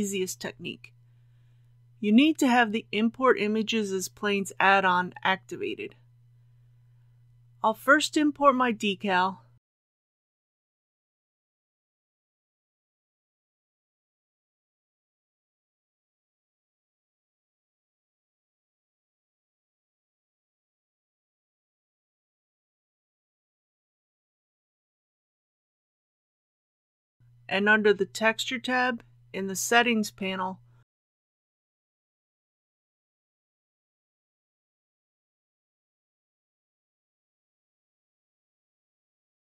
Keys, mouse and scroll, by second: 7.0 Delete, 7.5-8.6 drag, 12.4 r, 12.8 z, 13.6 KP_9, 14.6 click, 15.8-18.0 typing, 18.8 click, 19.1 KP_1, 20.0 g, 20.3 x, 22.1 click, 22.9 s, 23.8 click, 24.2 g, 24.5 x, 25.5 click, 33.9 scroll down 1.